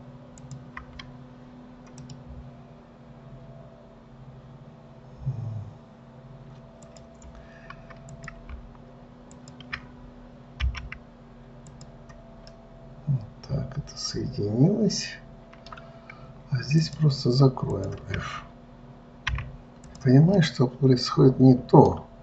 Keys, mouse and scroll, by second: 0.8 shift+click, 2.3-8.5 right drag, 8.5 click, 9.7 shift+click, 11.0 m, 12.7 scroll down 1, 12.8-15.8 middle drag, 17.1 shift+click, 18.1 shift+click, 19.6 f, 20.1 click, 20.7-22.2 middle drag.